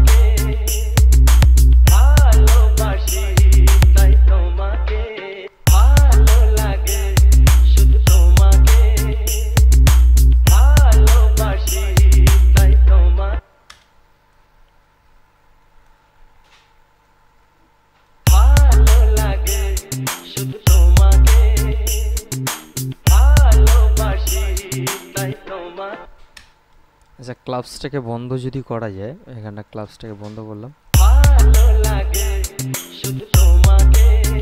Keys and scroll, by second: 5.6 space, 13.6 space, 18.4 space, 26.2 space, 31.2 space.